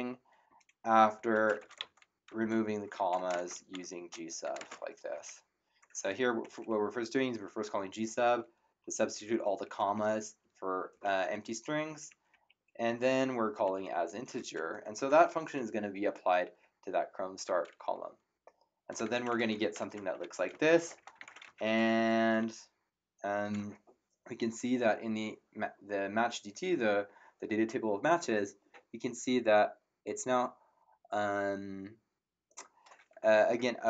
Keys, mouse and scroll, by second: 0.0-5.1 typing, 6.4 Right, 8.0 Left, 9.1 Right, 10.9 Left, 11.3 Right, 13.6 Right, 15.0 shift+0, 16.9 Return, 16.9 KP_Enter, 18.7-22.3 typing.